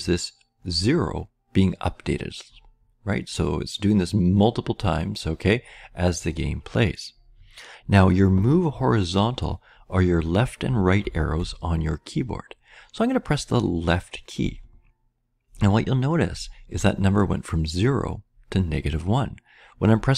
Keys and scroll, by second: 14.8-20.1 Left.